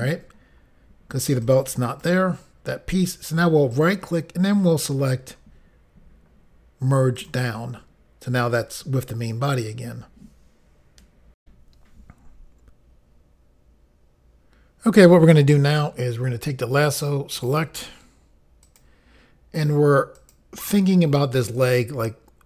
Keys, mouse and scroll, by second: 1.4 click, 1.9 click, 2.0 double click, 3.7 right click, 7.2 click, 11.4 Pause, 17.4 click, 18.6 click, 20.1 click, 21.5 click.